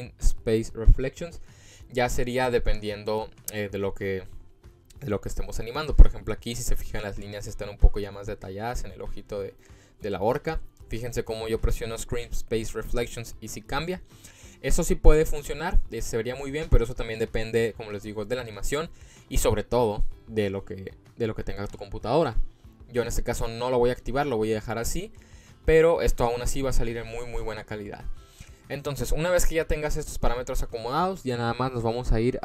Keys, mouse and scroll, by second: 7.2-7.7 scroll up 3, 8.0-8.8 middle drag, 8.9-9.6 scroll down 3, 9.6 middle click, 12.0 click, 12.6 click, 13.8 click, 22.8 click, 23.9 click, 25.1 click, 25.7 click, 27.6 click, 27.9 click, 29.1 click.